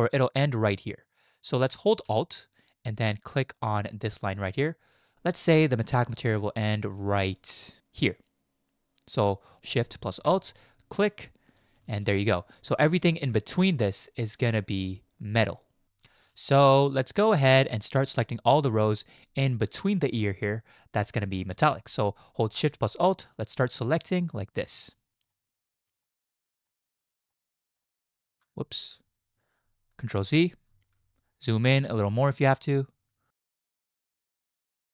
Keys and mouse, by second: 1.6 shift+click, 5.8 shift+click, 16.5 shift+click, 17.5 shift+click, 21.4 shift+click, 26.0 alt+shift+click, 26.6 alt+shift+click, 27.2 alt+shift+click, 28.7 ctrl+z, 31.5 alt+shift+click, 32.2 alt+shift+click, 32.7 shift+click, 33.4 alt+shift+click.